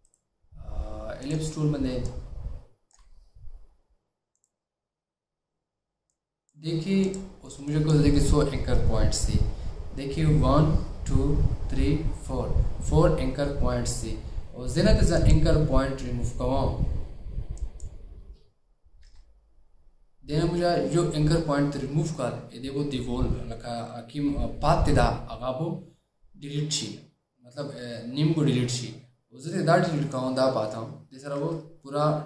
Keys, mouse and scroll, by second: 0.2 right click, 2.2 shift+click, 19.1 Delete, 31.5 Delete.